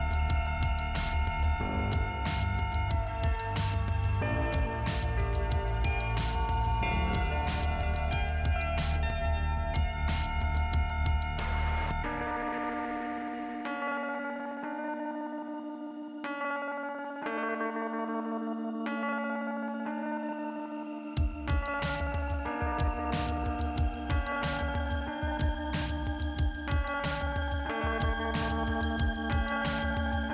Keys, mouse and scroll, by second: 1.9 click, 2.0 click, 5.0 alt+i, 6.0 scroll up 1, 6.6 scroll up 1, 9.2 click, 10.2 click, 12.6 click, 14.4 click, 17.3 click, 17.4 click, 17.6 click, 19.5 click, 20.4 middle click, 21.3 scroll up 2, 22.4-23.1 scroll down 1, 23.1-23.5 scroll up 1, 24.5 click, 25.1 click, 26.2 click, 27.5 click, 29.1 click, 29.8 click, 30.0 click.